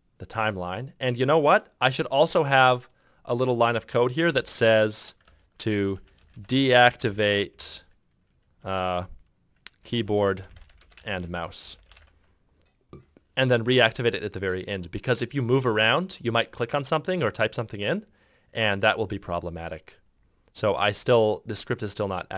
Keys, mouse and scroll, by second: 4.5 Return, 5.4 Tab, 5.9-12.7 typing.